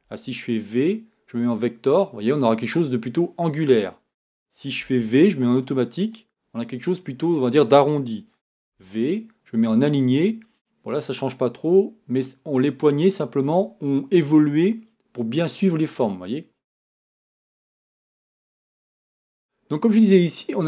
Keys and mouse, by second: 4.8 v, 8.6 v.